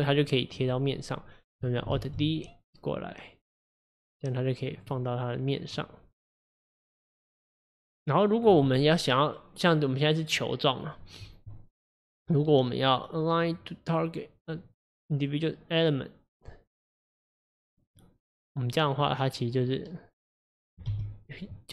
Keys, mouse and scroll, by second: 2.0 alt+d, 5.0-6.2 middle drag, 6.2-7.4 scroll down 1, 7.4-10.4 drag, 19.0 click, 19.6 click, 21.0 g.